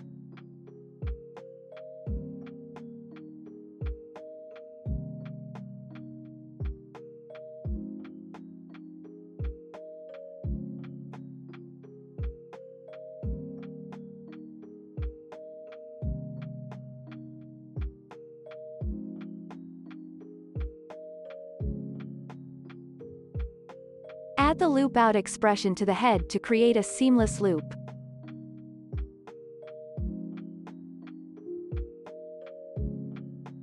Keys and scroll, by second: 0.4 space, 3.9 space, 10.2 ctrl+s, 12.7 ctrl+s, 19.5 ctrl+s, 22.6 Delete, 23.3 ctrl+s, 26.0-27.2 typing, 27.2 Down, 27.8 Return, 29.1 space.